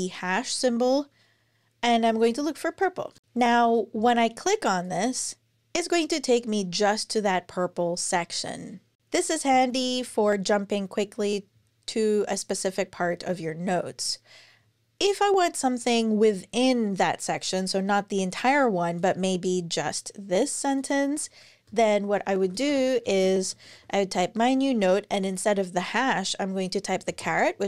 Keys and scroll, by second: 1.4-2.5 typing, 2.9 Return, 9.3 alt+super+Left, 21.4 Return, 21.9-23.6 typing, 26.8 shift+6.